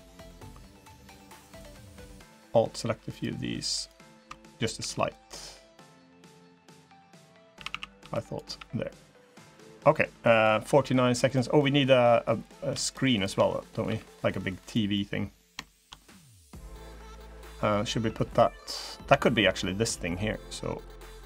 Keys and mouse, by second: 4.5 g, 7.3 a, 7.5 a, 7.7 b, 8.2 g, 11.3 click, 11.7 middle click, 12.7 shift+click, 13.6 g, 14.7 middle click, 15.3 click, 15.7 click, 17.2 click, 18.3 click, 18.9 shift+click, 19.0 shift+middle click, 19.8 middle click, 20.3 click, 20.6 click, 20.7 middle click, 20.9 click, 21.0 middle click.